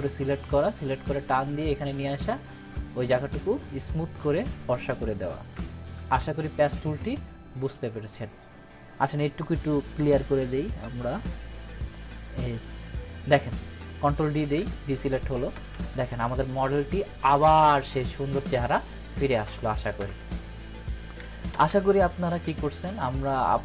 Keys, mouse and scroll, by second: 5.5 click, 6.0 ctrl+d, 9.8-11.7 ctrl+d, 14.4 ctrl+d, 23.0-23.6 drag.